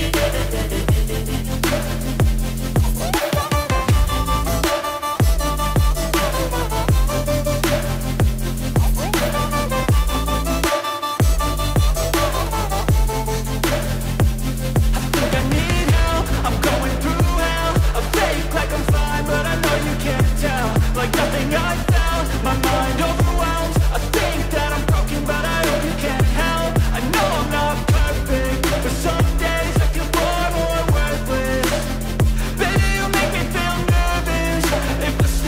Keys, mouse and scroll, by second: 1.4-3.4 drag, 5.7-28.3 drag, 28.3 space, 31.0-34.3 drag.